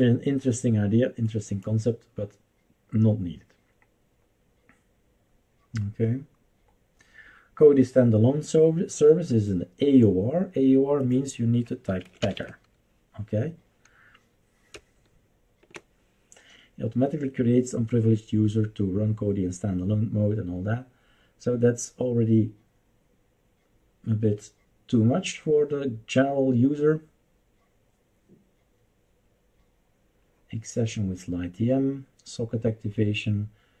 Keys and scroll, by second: 11.7-13.0 typing, 14.7-15.7 BackSpace.